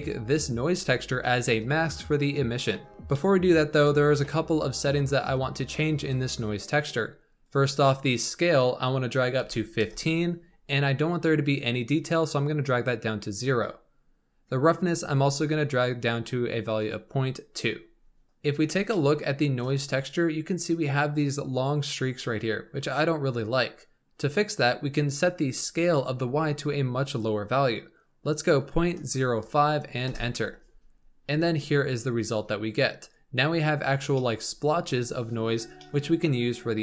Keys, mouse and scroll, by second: 2.9-3.2 scroll up 4, 3.1 middle click, 4.8 click, 7.4-10.5 drag, 11.8-18.0 drag, 18.9-21.9 shift+middle drag, 25.8-28.9 drag, 31.2-32.2 scroll down 3, 32.2-34.1 scroll up 2, 34.1-35.2 shift+middle drag, 35.2-35.7 scroll down 2, 35.7-36.8 shift+middle drag.